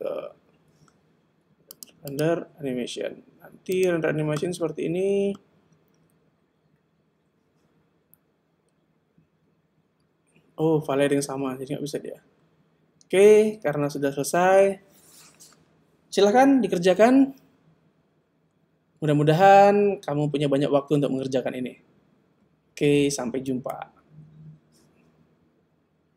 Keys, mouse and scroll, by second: 1.7 click, 2.1 click.